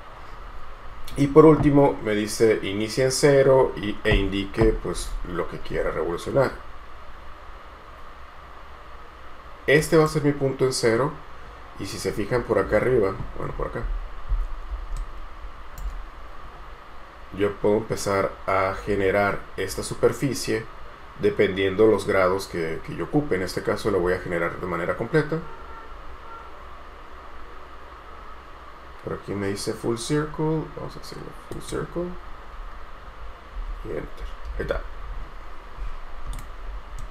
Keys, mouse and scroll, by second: 5.9 scroll down 1, 12.5 scroll down 1, 15.2 shift+right click, 33.7 space, 34.6 Escape, 34.8 Escape, 35.2 scroll down 1, 36.5 scroll up 1.